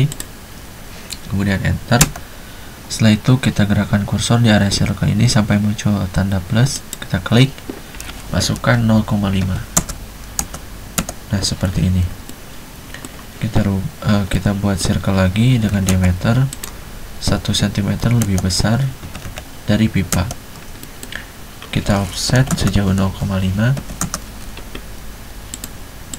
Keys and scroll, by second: 2.1 space, 8.7-11.1 typing, 15.8 c, 16.0 space, 18.2-20.2 typing, 22.5-24.1 typing.